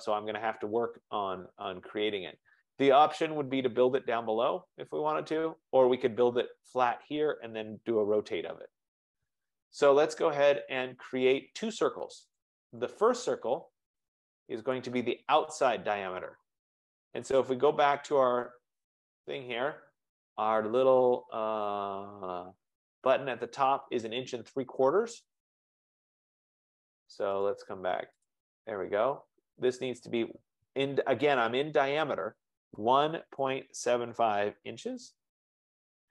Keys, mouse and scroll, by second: 2.7-3.9 scroll, 6.2-7.3 scroll, 12.5 click, 14.8 click, 18.2 click, 21.2 F15, 24.1 F15, 28.2 click, 28.5 click, 33.0-35.0 typing, 35.3 Return.